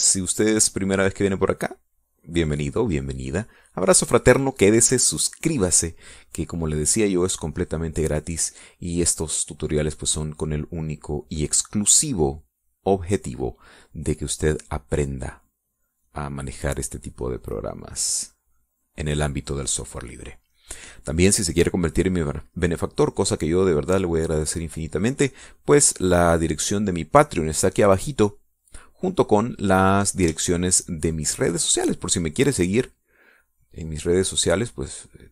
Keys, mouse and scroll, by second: 0.5 click, 1.5-4.6 drag, 4.7 click, 4.8 middle click, 5.3 middle click, 6.9 click, 10.1 click, 11.3-12.7 drag, 17.8-21.5 drag, 21.5 click, 21.7-23.1 middle drag, 24.3-29.1 drag, 31.8-33.4 shift+drag, 34.3-35.3 drag.